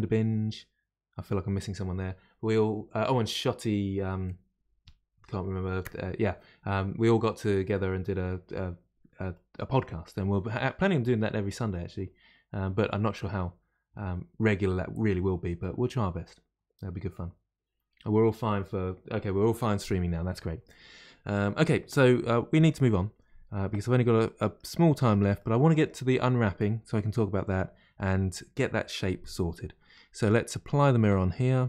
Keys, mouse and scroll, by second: 24.2-28.4 middle drag, 29.5 middle click, 30.1 click.